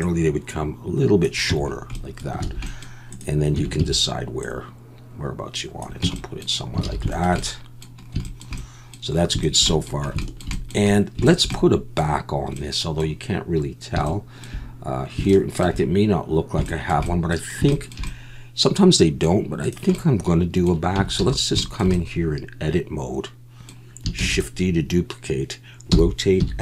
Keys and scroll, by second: 1.5 Tab, 2.4 alt+a, 3.5 Tab, 3.8 a, 6.0 Tab, 6.8 alt+a, 21.0 Tab, 21.2 a, 24.2 shift+d, 25.9 r, 26.4 x.